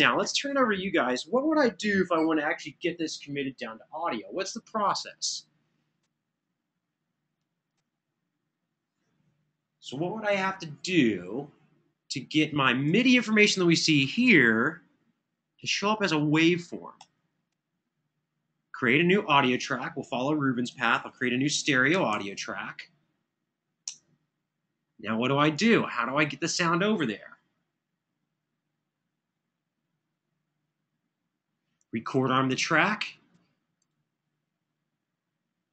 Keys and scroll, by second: 12.8 super+=, 16.8 super+=, 20.7 super+n, 21.9 super+Right, 23.6 Return.